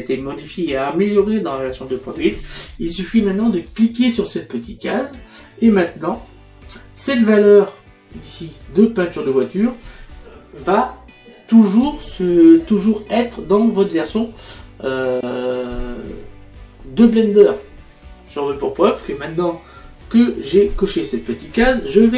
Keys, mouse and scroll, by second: 3.8 click.